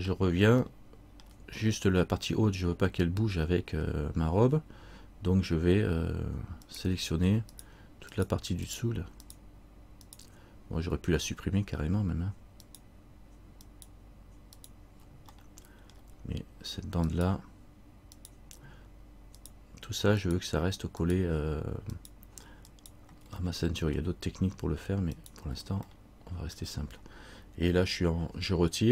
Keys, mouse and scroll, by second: 0.2-0.7 scroll down 1, 0.8 shift+middle click, 6.8 right click, 7.7 shift+right click, 11.4 middle click, 12.8 shift+right click, 15.5 middle click, 17.2 shift+right click, 23.6 middle click, 25.3 shift+right click, 26.1 middle click.